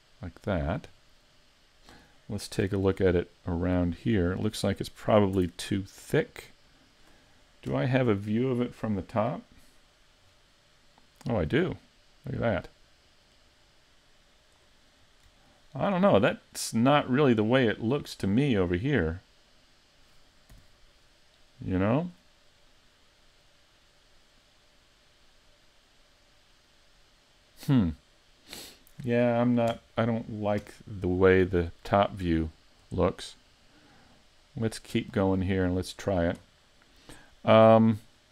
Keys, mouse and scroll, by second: 0.1 s, 0.7 click, 3.4 middle click, 5.4 Tab, 5.8-6.3 scroll down 3, 6.3 middle click, 7.7 KP_7, 10.3-10.9 scroll down 6, 12.3 click, 15.0-15.5 scroll up 3, 15.5 shift+middle click, 16.1-16.6 scroll up 2, 16.6 shift+middle click, 20.6 g, 27.7 click, 28.0-29.7 scroll down 3, 29.7 KP_7, 30.6 KP_3, 32.0-32.5 scroll up 3, 32.5 shift+middle click, 33.5 click, 35.3 scroll up 2.